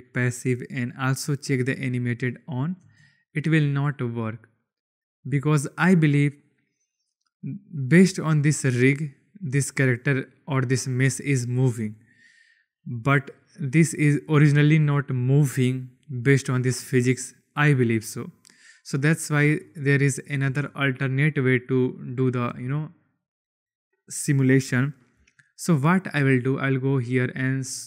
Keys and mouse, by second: 1.1 click, 2.4 click, 2.7 space, 5.3 space, 8.5 click, 11.7 click, 12.6 click, 14.5-15.0 shift+drag, 18.1 click, 19.5 shift+click, 20.4 space, 22.4 space, 26.4 click.